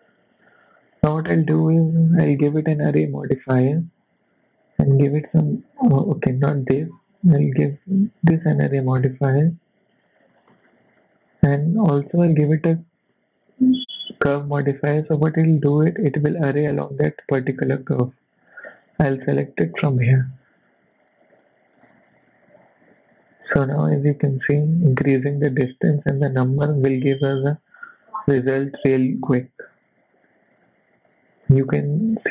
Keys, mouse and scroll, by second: 0.5 click, 1.1-1.7 scroll down 7, 1.7 shift+middle click, 2.6 click, 4.9 click, 6.8 click, 7.7 click, 8.8 click, 10.4 scroll down 1, 10.5 shift+middle click, 12.4 click, 12.7 click, 18.4 click, 21.3 click, 21.8 click, 22.8 click, 24.3 click, 26.5 click, 26.8 click, 26.9 click, 27.1 click, 27.4 click, 27.7 click, 28.2 click, 28.9 click, 30.3 click.